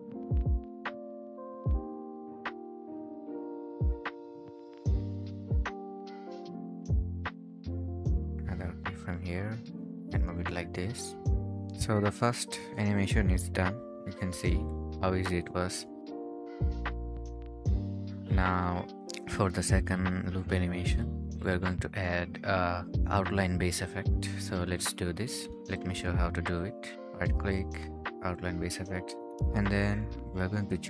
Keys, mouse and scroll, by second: 3.9-5.3 scroll down 1, 5.5-6.5 typing, 13.4-14.2 typing, 17.4 Escape, 18.0-19.3 scroll up 1, 22.5-23.7 scroll down 1, 23.8 right click, 30.0 right click.